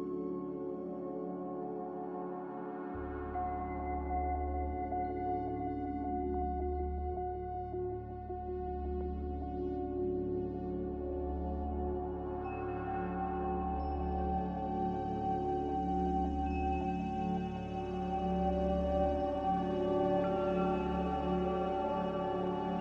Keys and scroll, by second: 6.7 q, 18.7 q, 20.5 q, 21.9 q.